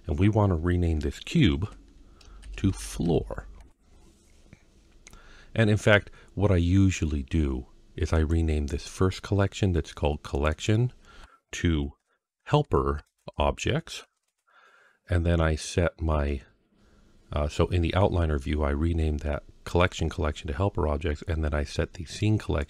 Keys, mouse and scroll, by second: 1.4 F2, 2.7 o, 8.0 click, 10.1 click, 10.3-14.1 drag, 22.4 click.